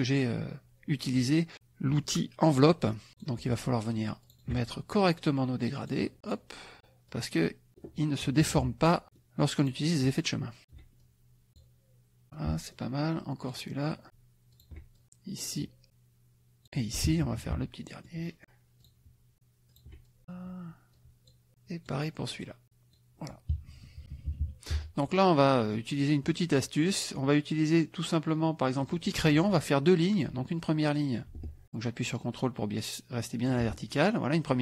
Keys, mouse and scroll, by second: 3.1 click, 4.3 shift+click, 4.7-6.0 shift+drag, 6.2 click, 7.1 click, 8.4 KP_Subtract, 9.0 middle click, 9.6 click, 10.6 shift+click, 11.0 shift+click, 12.2 middle click, 13.4 click, 14.6 shift+click, 14.9 shift+click, 15.4 click, 15.8-16.8 drag, 17.2 KP_Subtract, 18.0 middle click, 18.8 click, 19.8 shift+click, 20.0 shift+click, 20.9-22.0 drag, 22.3 click, 23.7 KP_Subtract, 24.7 F1, 25.2 middle click, 26.3 click, 28.8 click, 30.1 click, 33.5 ctrl+click.